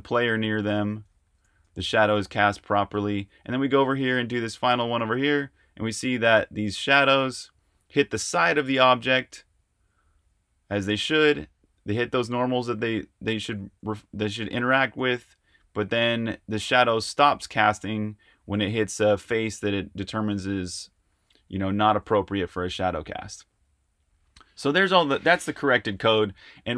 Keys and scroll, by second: 0.0-7.5 typing, 8.9-14.1 typing, 15.5 typing, 17.1-18.4 typing, 19.7-26.3 typing.